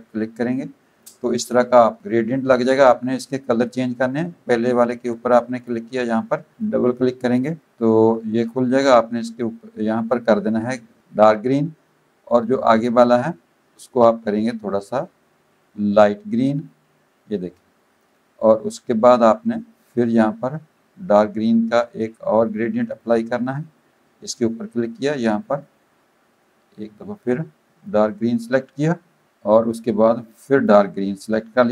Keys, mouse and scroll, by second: 5.6 click, 6.5 click, 12.7 click, 16.5 click, 23.0 click, 24.3 click, 25.3 click, 27.8 click, 30.3 click.